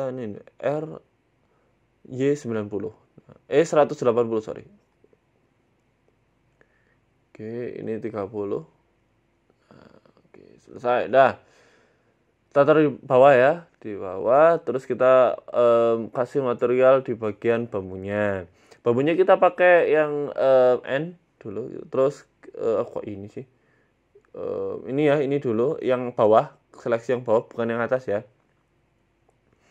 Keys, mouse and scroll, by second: 0.7 r, 3.8 g, 5.4 s, 6.9 click, 8.7 middle click, 8.7-9.3 scroll down 3, 9.3 middle click, 9.8 scroll up 1, 10.1-10.4 scroll down 1, 10.4 right click, 10.8-11.1 scroll down 4, 11.1 shift+middle click, 11.7 g, 12.8 scroll up 4, 13.0 shift+middle click, 15.3 middle click, 15.6 scroll up 3, 15.9 middle click, 16.7 middle click, 18.0 click.